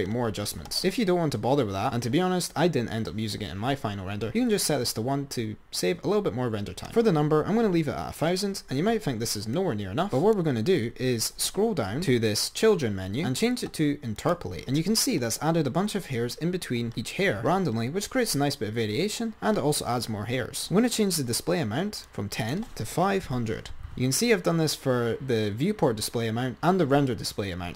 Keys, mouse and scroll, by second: 9.7 click, 11.6-12.4 scroll down 20, 14.5 click, 22.4 click.